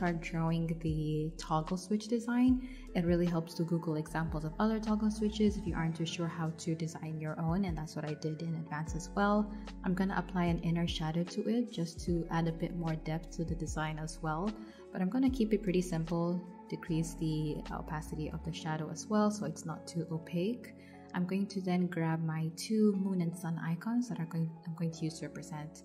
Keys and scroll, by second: 0.6 v, 8.7 shift+Up, 9.3 shift+Down, 9.7 shift+Up, 11.4 Down, 11.6 shift+Up, 14.1 Down, 15.1 Up, 23.7 super+c, 24.6 super+v.